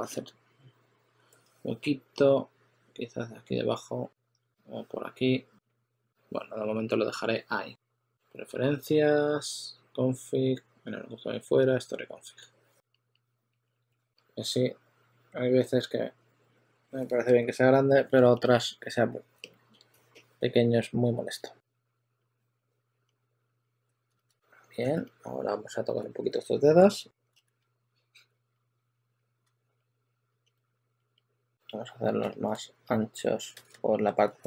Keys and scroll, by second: 24.0-25.8 typing, 24.2 super+a, 27.1-28.2 typing, 33.4 super+z.